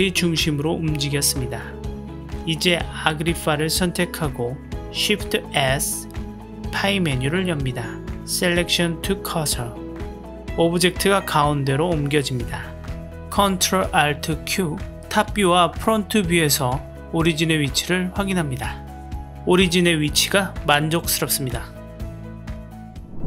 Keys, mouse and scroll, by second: 3.0-3.9 middle drag, 4.8 shift+s, 11.2 KP_Decimal, 11.9-13.1 middle drag, 13.6 ctrl+alt+q, 20.8 click, 21.5 ctrl+alt+q.